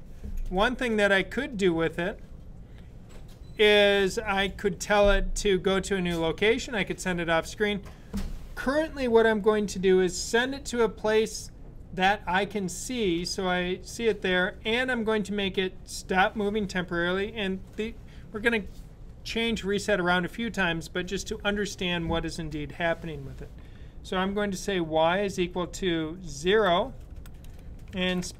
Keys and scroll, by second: 24.2 typing, 25.2 typing, 26.4-28.3 typing.